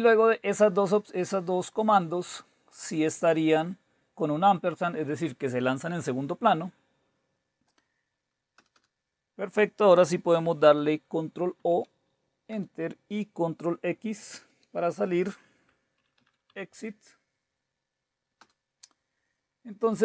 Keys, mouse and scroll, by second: 3.2-5.5 drag, 8.6 Return, 8.7 Return, 11.6 ctrl+o, 12.6 Return, 14.4 ctrl+x, 15.7-17.0 typing, 18.4 Return.